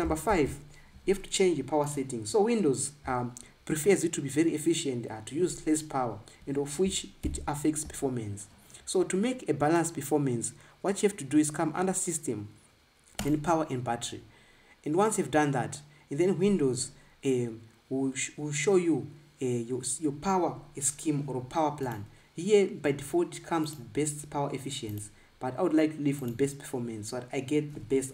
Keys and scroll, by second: 1.1 ctrl+b, 8.1 super+i.